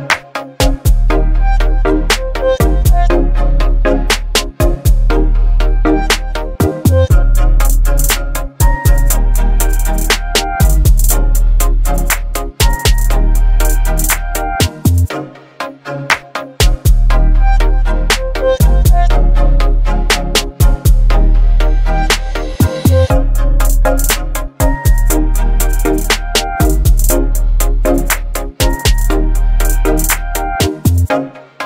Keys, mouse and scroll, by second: 1.0 0, 4.3 ctrl+0, 4.7-12.0 alt+click, 13.0-16.5 alt+drag, 20.5 ctrl+BackSpace, 22.9 ctrl+BackSpace, 22.9 ctrl+click, 26.7 ctrl+click, 28.7 ctrl+g.